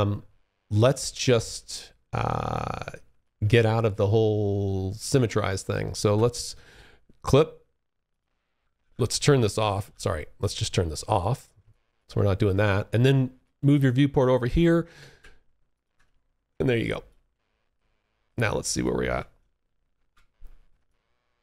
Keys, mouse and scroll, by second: 0.5 alt+click, 1.7 alt+click, 5.2 alt+x, 7.2 click, 8.0 alt+x, 8.5 click, 9.0 alt+x, 10.3 click, 10.8 alt+click, 11.3 alt+middle click, 11.8 alt+click, 12.7 alt+middle click, 14.4-15.1 alt+v, 15.8 alt+click, 16.5 alt+middle click, 16.9 alt+right click, 17.6 alt+click, 19.1 F1, 20.0 alt+click, 21.3 alt+middle click.